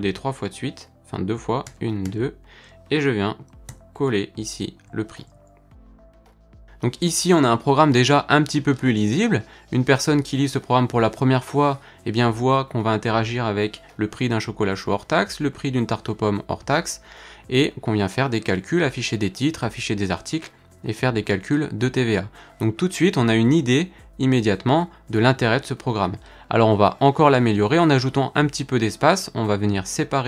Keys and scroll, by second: 1.7 super+d, 3.7 super+v.